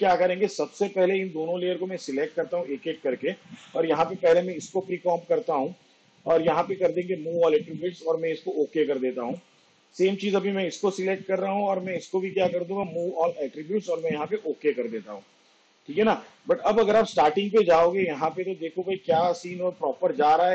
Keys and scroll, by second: 4.4 ctrl+shift+c, 11.6 ctrl+shift+c.